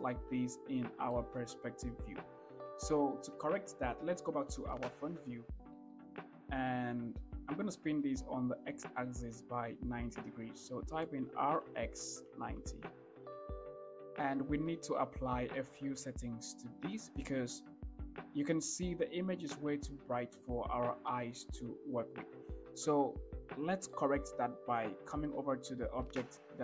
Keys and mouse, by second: 2.5 middle click, 4.7 KP_1, 6.2-6.5 shift+middle drag, 11.5 r, 11.9 x, 12.6 9, 12.9 0.